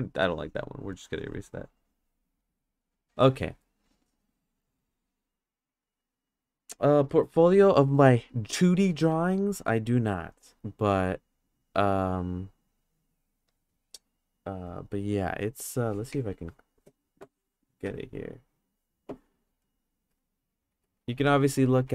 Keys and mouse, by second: 0.2 click, 0.9-2.4 drag.